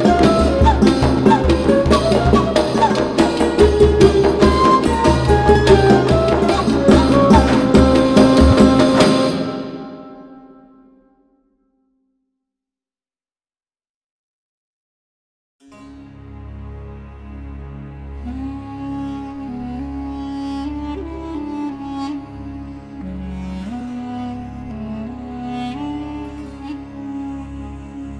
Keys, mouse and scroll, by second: 9.2 click, 13.0 space, 15.4 click, 15.7 space, 18.0-20.6 drag, 20.6 right click, 22.0 click, 23.8 space, 24.0 click, 24.3 space, 25.7-26.6 scroll up 1, 26.6 click, 27.4-27.8 scroll down 1.